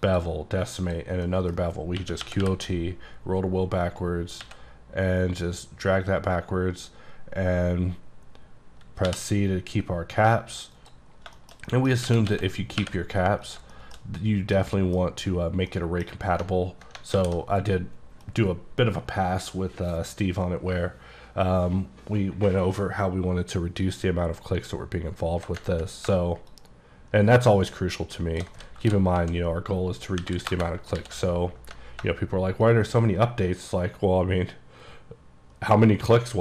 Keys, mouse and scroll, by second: 0.9 click, 1.3 middle click, 2.1 q, 2.3 o, 2.5 t, 3.2-4.5 scroll down 1, 4.5 x, 9.2 c, 10.8 click, 11.2 scroll down 5, 11.5 shift+middle click, 12.1 g, 12.3 x, 12.9 y, 13.5 click, 13.8 shift+middle click, 14.3-14.7 scroll up 2, 14.7 middle click, 15.6 scroll down 1, 15.8 middle click, 16.5 ctrl+middle click, 17.2 alt+w, 26.6 shift+click, 26.9 shift+click, 28.1 shift+click, 28.9-31.0 typing, 30.6 KP_Enter, 32.7 ctrl+shift+click.